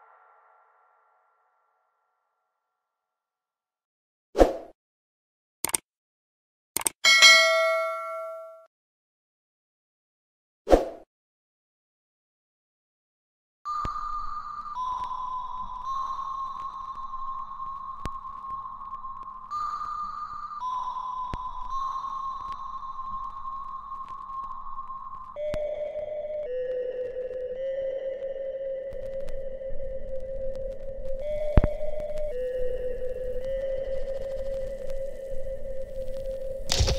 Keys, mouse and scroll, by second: 3.1 space, 4.1 alt+click, 4.9-6.4 right drag, 6.4 click, 6.4 click, 7.7-9.6 ctrl+right drag, 10.1-12.8 alt+drag, 13.8 alt+right click, 14.2 alt+middle click, 15.6-17.0 ctrl+drag, 17.0 alt+click, 17.8 alt+middle click, 19.0 click, 19.9 scroll down 1, 20.7-22.2 alt+middle drag, 22.7-23.3 alt+scroll down 1, 24.0 click, 25.5 ctrl+click, 26.7 alt+click, 29.4-32.0 alt+drag, 32.0-36.9 ctrl+drag.